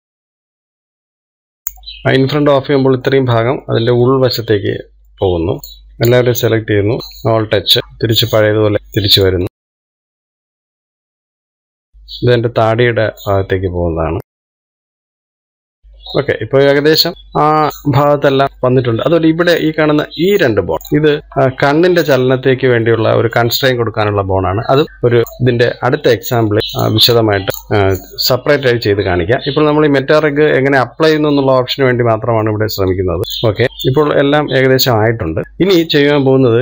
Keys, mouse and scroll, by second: 0.4 KP_3, 0.7 KP_1, 1.1 click, 2.5-2.9 scroll down 3, 2.9-5.6 middle drag, 5.6 click, 6.8 click, 7.0-8.1 scroll up 2, 8.1 alt+h, 8.7 middle click, 9.4 click, 9.5 middle click, 9.9-10.2 scroll up 1, 10.2 click, 10.4 scroll up 2, 10.5 shift+middle click, 10.8 shift+click, 11.0 shift+click, 12.6 click, 14.4 scroll up 1, 14.6 click, 14.8 shift+click, 15.0 click, 15.7 middle click, 16.6-16.9 scroll down 2, 17.1-18.5 middle drag, 19.6-20.1 scroll up 1, 20.1 shift+middle click, 20.9 click, 21.2-22.2 middle drag, 22.2 shift+click, 22.8-25.1 middle drag, 25.2-26.3 middle drag, 26.3 click, 27.0 middle click, 27.5 shift+click, 28.0 click, 29.4-32.5 middle drag, 32.5 click, 33.2 scroll down 7, 33.5-35.3 shift+middle drag, 35.3 scroll down 1, 35.4-36.6 middle drag.